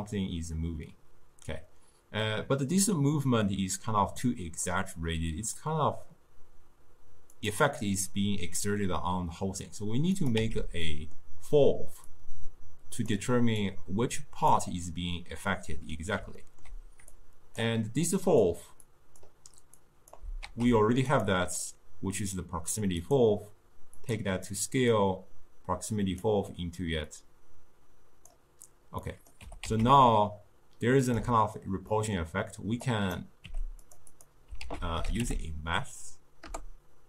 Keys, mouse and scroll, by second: 10.2 click, 10.4 x, 11.1-12.2 middle drag, 12.2 click, 13.8 click, 16.5 ctrl+middle click, 17.2 click, 18.2 click, 18.9 click, 19.9 click, 20.5 shift+d, 23.2-25.1 drag, 25.8 click, 27.2 click, 29.1 middle click, 29.5 g, 32.0-33.0 middle drag, 33.0 click, 33.5 g, 34.2 click, 34.7 ctrl+a.